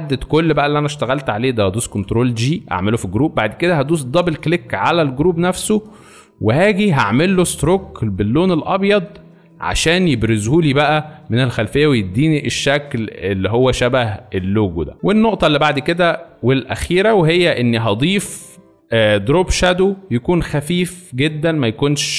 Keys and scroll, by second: 1.7 ctrl+shift+g.